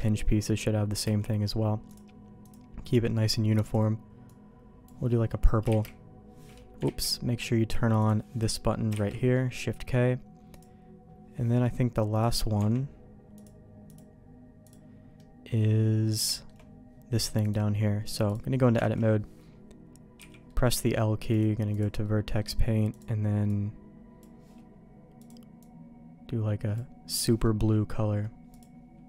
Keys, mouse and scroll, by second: 1.0 click, 1.9 click, 5.7 shift+k, 6.8 ctrl+z, 8.0 click, 8.9 shift+k, 9.3 middle click, 10.5-12.2 drag, 12.5 Tab, 13.4 click, 14.6 click, 15.1 middle click, 16.3 shift+middle click, 17.4 click, 18.9 alt+a, 20.2 l, 20.4 middle click, 21.3 click, 22.0 middle click, 27.3 middle click, 28.5-29.0 drag.